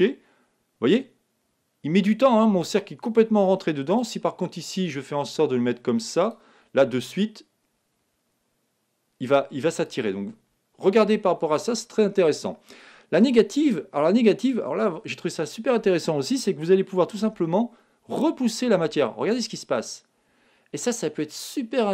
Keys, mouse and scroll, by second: 4.8-6.6 drag, 6.8 g, 9.9-11.7 drag, 13.2-14.9 drag, 17.2 g.